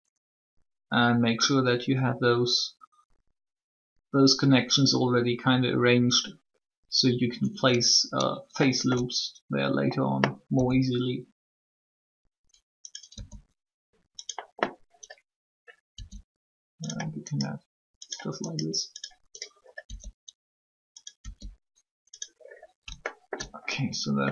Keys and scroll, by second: 10.5 e, 13.1 e, 15.9 e, 19.8 e.